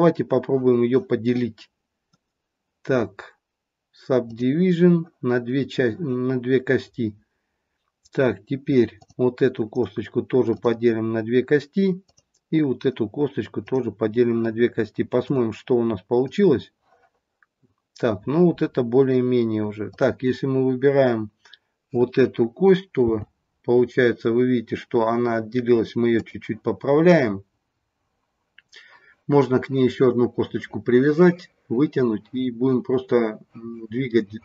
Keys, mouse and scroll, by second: 2.0 right click, 8.9 click, 9.7 right click, 12.6 click, 15.9 click, 19.8 click, 23.0 g.